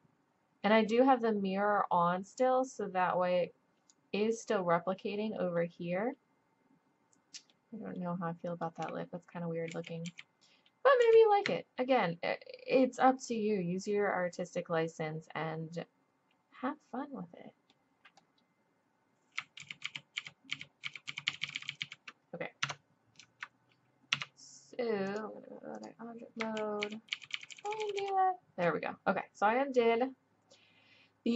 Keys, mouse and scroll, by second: 5.6-6.0 middle drag, 8.2-8.5 drag, 9.7 ctrl+z, 10.1 ctrl+z, 11.0 ctrl+z, 19.6 ctrl+z, 19.8 ctrl+z, 20.3 ctrl+z, 20.6 ctrl+z, 20.8-21.8 ctrl+z, 22.7 Tab, 24.1 Tab, 26.0 drag, 26.9 ctrl+z, 27.2-27.7 ctrl+z, 27.8 ctrl+z, 28.0 ctrl+z.